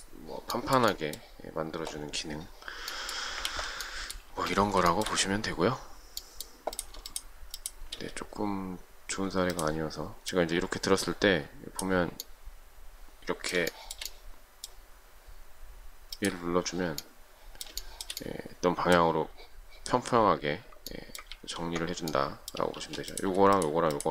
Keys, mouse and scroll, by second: 0.6 shift+middle click, 3.5 ctrl+z, 4.3 space, 5.0 shift+middle click, 7.1 shift+click, 13.8 shift+middle click, 17.8 shift+middle click, 21.4 ctrl+z, 22.8 space, 23.6 shift+click, 23.7 shift+double click, 24.0 shift+click.